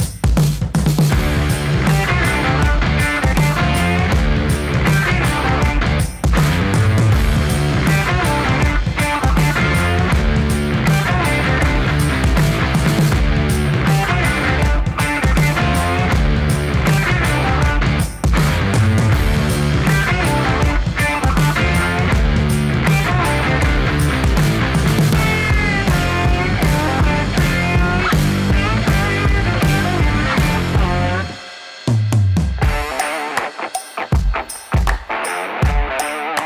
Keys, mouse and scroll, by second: 2.5-7.7 drag, 7.7 space, 13.4 click, 14.0 space, 19.0 space, 20.0-21.8 drag, 22.3 shift+click, 25.1-27.0 typing, 28.1-33.3 typing, 34.7 click, 35.1 ctrl+d, 36.2 Return.